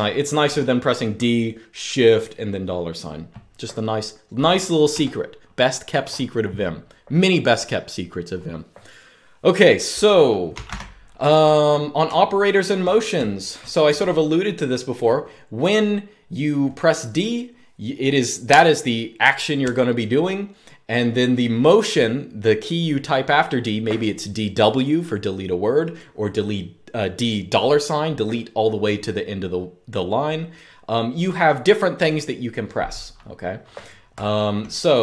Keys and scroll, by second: 4.6 u, 10.0-13.7 typing, 33.8-35.0 typing.